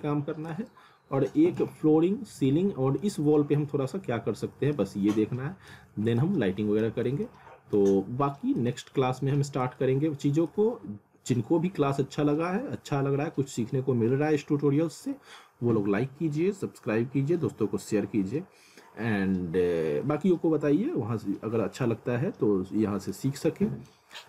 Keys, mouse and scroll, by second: 0.7 alt+middle click, 1.7 scroll up 1, 1.8 alt+middle click, 5.9 scroll up 1, 6.2 alt+middle click, 7.0 scroll down 1, 7.3 middle click, 8.0 middle click, 8.8 middle click, 9.8 alt+middle click, 23.1 middle click.